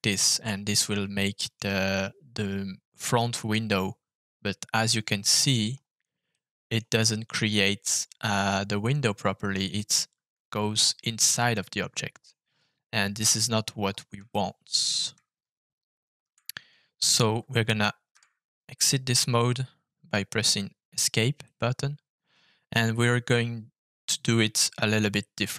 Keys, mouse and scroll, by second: 0.0 click, 0.4 scroll down 1, 0.4 middle click, 1.1 shift+middle click, 2.4-3.1 scroll up 3, 3.5-5.5 middle drag, 5.6 scroll up 2, 6.3 middle click, 8.2-9.5 middle drag, 11.5 middle click, 12.6-13.8 scroll down 3, 14.3 shift+middle click, 18.1 Escape, 19.1 scroll down 1, 21.4-22.6 middle drag.